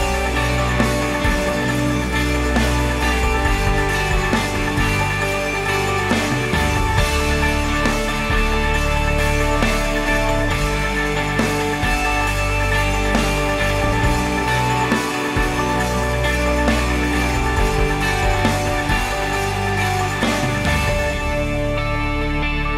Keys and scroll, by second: 6.0 Left, 6.9-8.8 typing, 13.4-15.0 typing, 15.5 Return, 19.3 ctrl+c, 21.6 ctrl+v.